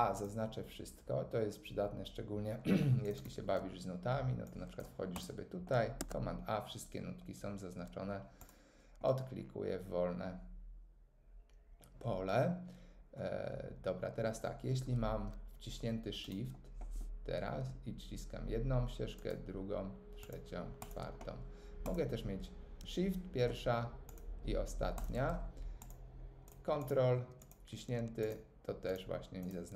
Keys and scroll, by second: 5.9 super+a.